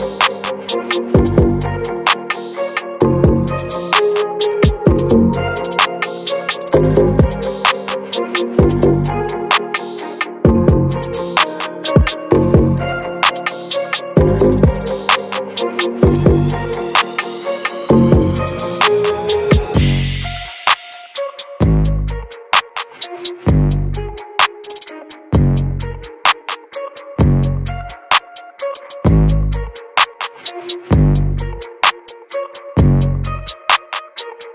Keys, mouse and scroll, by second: 0.8 scroll up 1, 1.1-3.8 shift+middle drag, 3.8-7.0 alt+shift+drag, 7.4 ctrl+b, 15.0-16.6 right drag, 16.6-27.5 drag, 27.5 scroll up 1, 27.8-28.2 scroll down 2, 28.2 click, 29.0 alt+middle click, 29.5 ctrl+s, 30.0-32.0 shift+scroll up 1, 32.1 click, 32.8 scroll down 1, 33.0-34.4 middle drag, 34.4-34.5 drag.